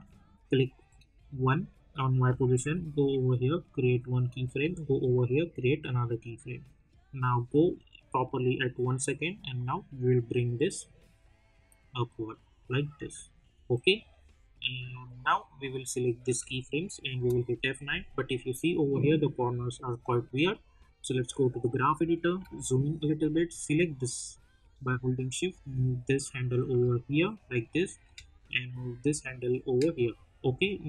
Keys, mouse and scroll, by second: 2.6 k, 4.2 click, 4.6 k, 5.4-17.1 drag, 17.1 F9, 21.1 click, 22.4 =, 23.2-28.0 drag, 28.0-30.7 drag, 30.7-30.8 drag.